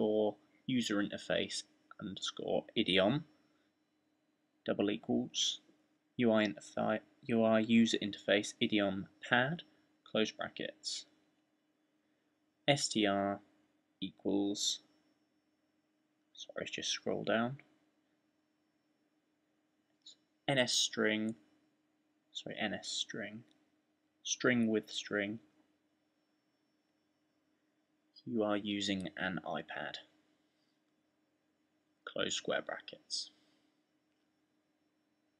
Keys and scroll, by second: 2.2-3.2 typing, 4.3-5.5 typing, 7.7 shift+0, 10.9-13.1 typing, 18.8-20.5 typing, 21.9-28.4 typing, 29.5-35.3 typing.